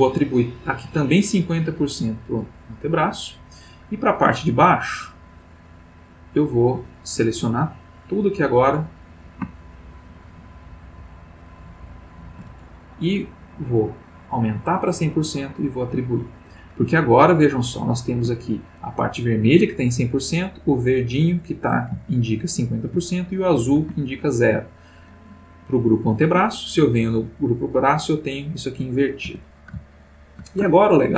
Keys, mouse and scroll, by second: 2.7 click, 4.7 click, 4.7 middle click, 6.3 click, 7.4-9.3 drag, 9.7 shift+click, 10.7-12.1 shift+drag, 13.9-15.2 drag, 15.7 click, 17.0-18.3 ctrl+middle drag, 22.0-23.0 shift+middle drag, 24.1 ctrl+middle click, 27.1 click, 29.2 Tab, 29.9 ctrl+middle click, 30.8 ctrl+middle click.